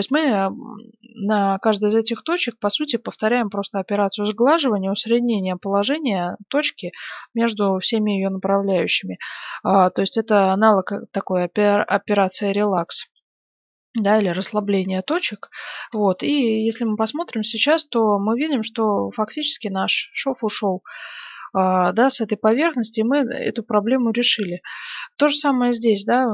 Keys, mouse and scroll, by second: 13.9-15.9 middle drag, 15.9 Tab, 18.2 middle click, 23.0-26.3 middle drag.